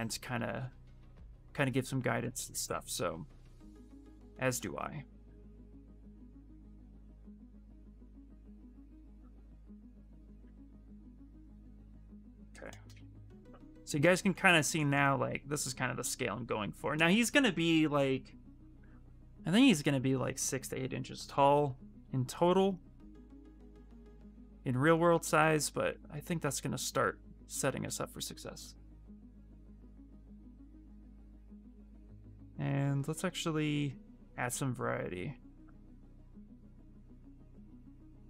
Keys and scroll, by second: 2.9 q, 3.1 space, 32.2 e, 36.8 q, 37.8 shift+f.